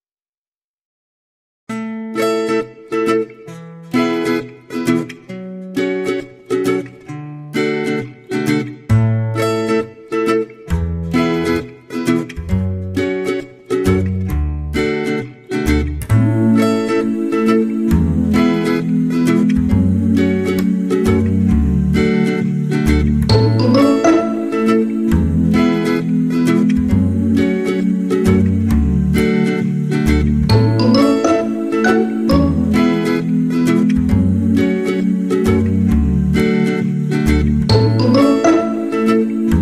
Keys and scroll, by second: 3.9 ctrl+0.